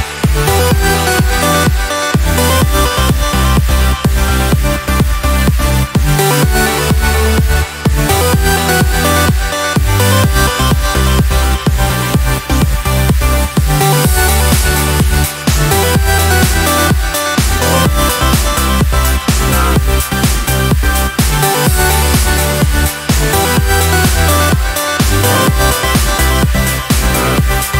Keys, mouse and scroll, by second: 0.7 click, 1.7-2.3 ctrl+scroll down 4, 4.4-5.0 ctrl+scroll up 2, 6.5 ctrl+scroll down 2, 7.3 ctrl+click, 7.8 ctrl+middle click, 10.9 ctrl+z, 15.3 click, 17.5-17.8 ctrl+scroll up 2, 18.5 ctrl+space, 20.3-21.0 ctrl+scroll down 4, 21.4 space, 22.5 click, 23.8 ctrl+click, 24.7 ctrl+z, 26.2 ctrl+d.